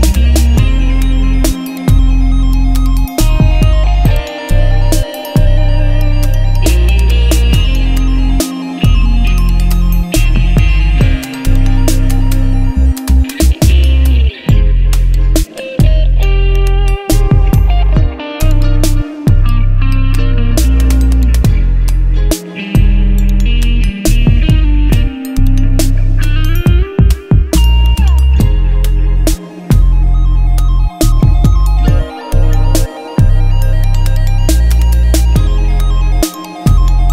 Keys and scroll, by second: 12.4 alt+Tab, 13.3 Return, 14.3-16.5 typing, 21.5 ctrl+shift+n, 24.1 F2, 24.5 BackSpace, 24.7 Return, 25.1 F2, 30.9 Return.